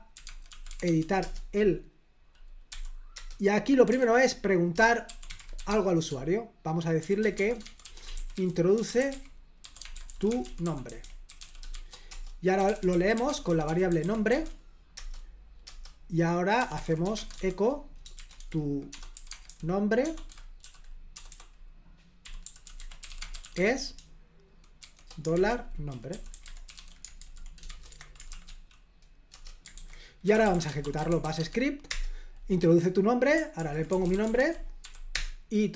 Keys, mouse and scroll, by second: 0.0-1.2 typing, 1.2 Return, 2.7 typing, 3.2 Return, 4.8 Return, 4.8-28.8 typing, 27.9 Escape, 29.3 Return, 29.7 super+h, 30.0-31.7 typing, 31.9 Return, 33.7-35.3 typing.